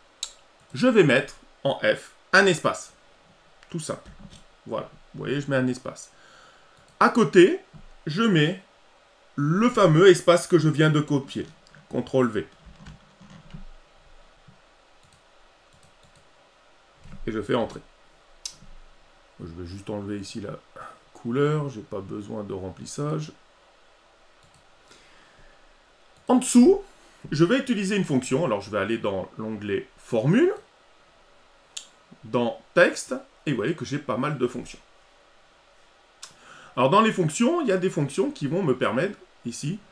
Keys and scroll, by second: 12.7 ctrl+v.